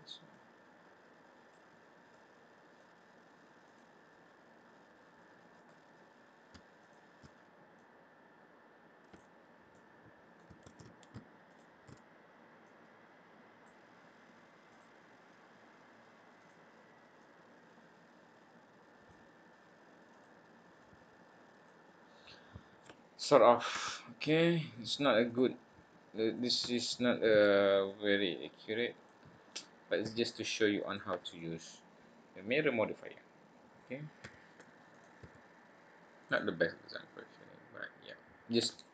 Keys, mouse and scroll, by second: 0.2 click, 1.7 scroll down 2, 2.1 middle click, 3.6 click, 5.5 click, 6.7 alt+shift+click, 7.7 click, 9.7 middle click, 10.6 ctrl+z, 11.5 alt+shift+click, 12.6 click, 14.7 click, 15.6-16.3 scroll up 2, 16.3 click, 17.2 click, 20.1 click, 20.8 click, 21.9 scroll down 3, 22.2 middle click, 23.0-23.4 scroll down 1, 23.4-23.9 scroll up 1, 23.9 shift+middle click, 23.9-24.3 scroll up 1, 25.2 click, 25.7-26.3 scroll up 2, 26.3 click, 26.8 shift+click, 27.8 click, 30.0 s, 31.3 middle click, 33.1 scroll down 1, 33.5-34.1 scroll up 1, 34.2 e, 35.1 s, 36.9 click, 38.8 scroll down 1.